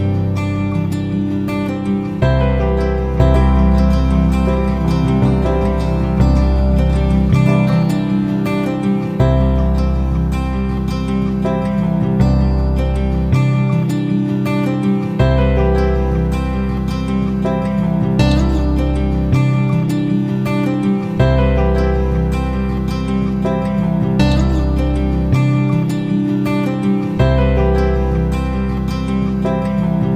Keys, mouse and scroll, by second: 3.3 F9, 3.6-12.6 drag, 19.0 F9, 19.6 click, 21.0 shift+click, 22.0 shift+click, 23.7 click.